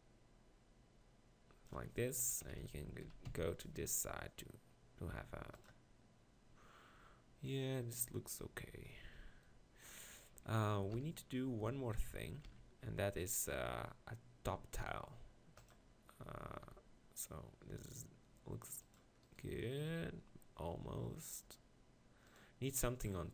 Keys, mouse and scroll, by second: 2.2 KP_1, 2.5-3.3 KP_4, 11.0 KP_1, 11.7-12.5 KP_4, 16.7 g, 20.0 g.